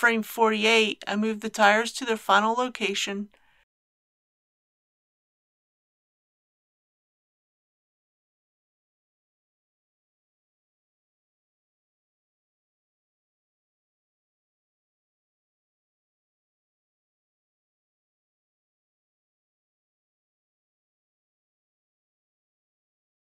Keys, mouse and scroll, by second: 5.0 KP_0, 7.4 shift+click, 13.1 KP_3, 15.9 shift+middle click, 17.3 shift+g, 17.6 shift+y, 18.9 click, 19.2 shift+middle click, 19.7 shift+g, 19.8 shift+y, 20.1 click, 20.3 shift+middle click, 20.6 scroll down 1, 21.2 shift+g, 21.6 click, 21.8 shift+middle click, 22.3 shift+g, 22.4 shift+y, 22.9 click, 23.1 middle click.